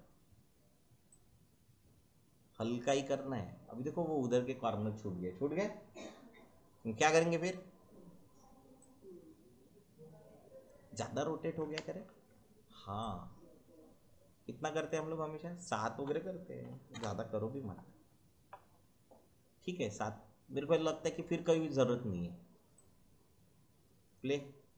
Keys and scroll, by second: 11.7 ctrl+z, 16.6 7, 16.9 Return.